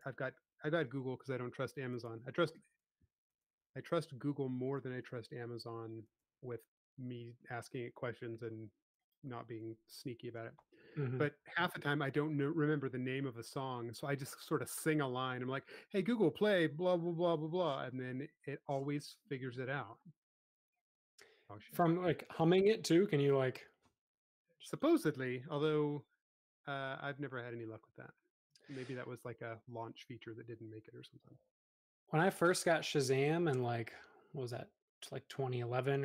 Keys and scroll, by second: 0.9 space, 11.2 s, 14.7 space, 19.5 m, 19.9 Escape, 22.4 space, 31.2 e, 33.2 super+z, 33.6 space.